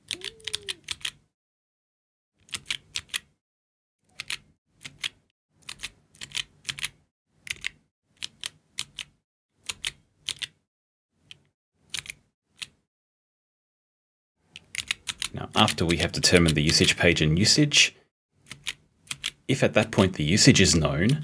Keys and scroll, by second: 0.6 p, 7.5 o, 14.8 h, 15.6 *, 16.4 p, 19.9 b, 21.1 k.